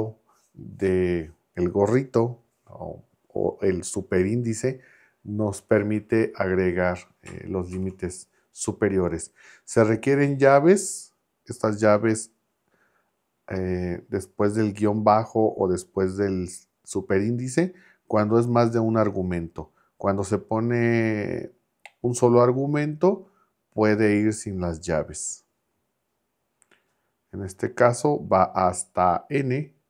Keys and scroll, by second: 7.7 shift+[.